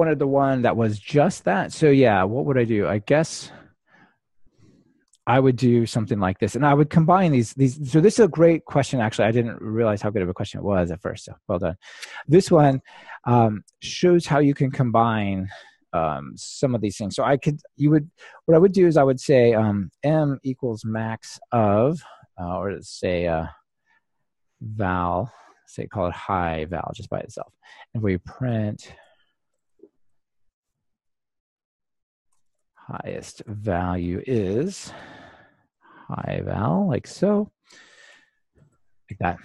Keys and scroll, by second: 10.0 Delete, 37.2 Return.